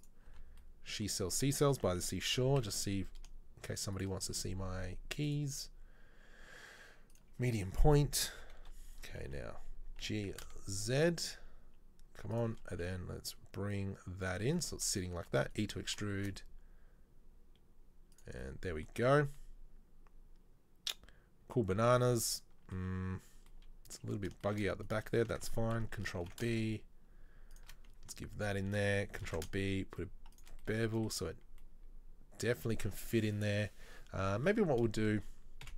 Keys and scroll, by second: 0.4 n, 1.8 a, 2.4 g, 8.4 KP_3, 8.8 KP_1, 10.1 g, 12.8 s, 15.4 e, 26.3 ctrl+b.